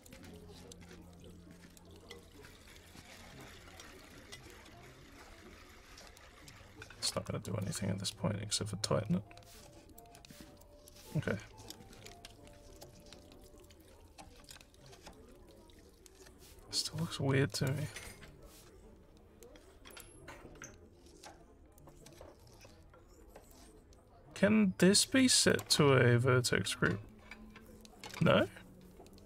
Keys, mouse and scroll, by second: 0.5 alt+middle click, 0.9-4.0 alt+drag, 4.4 click, 5.6 click, 7.3 alt+middle click, 7.6-10.0 alt+drag, 10.6 alt+middle click, 12.4 Tab, 13.4 alt+middle click, 13.8-17.7 alt+drag, 19.9 click, 21.8 click, 23.5 click, 25.5 click.